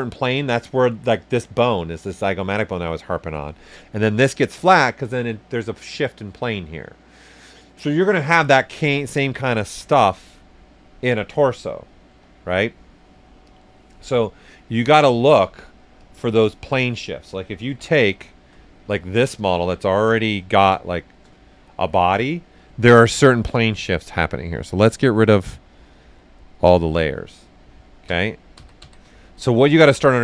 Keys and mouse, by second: 9.2 alt+right click, 13.4 click, 15.9 click, 16.0 click, 18.2 alt+right click, 19.2 right click, 20.1 ctrl+shift+right click, 20.5 shift+s, 20.5 shift+click, 21.3 alt+shift+right click, 24.8 click, 28.0 ctrl+d, 29.5 alt+right click.